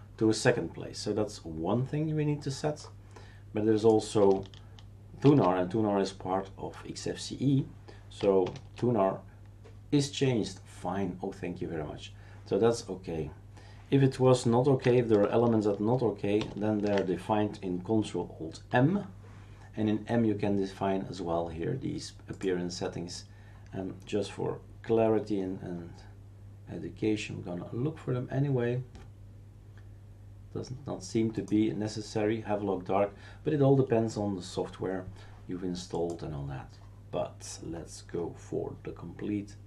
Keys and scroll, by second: 5.2 shift+super+q, 8.4 shift+super+Return, 16.4 ctrl+alt+m.